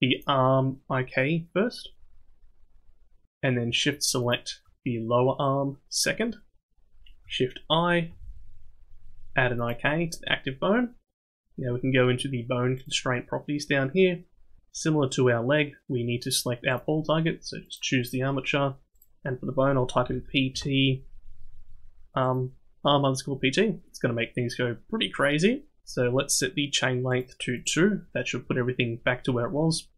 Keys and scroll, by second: 8.1 shift+i.